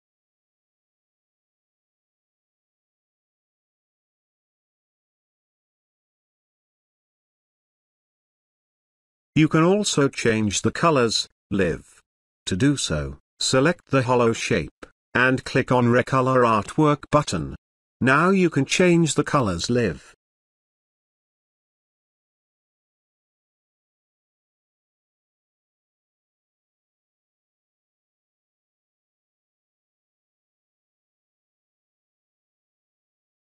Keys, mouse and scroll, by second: 5.5 space, 5.6-6.3 ctrl+drag, 11.2 click, 14.4-16.0 scroll down 1, 16.0-19.9 drag, 25.7-27.0 drag.